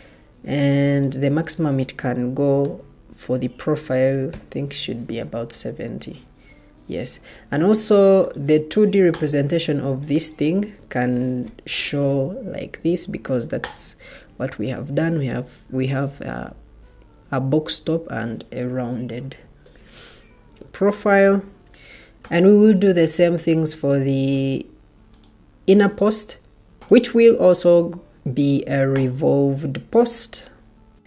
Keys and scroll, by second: 3.8-4.6 typing.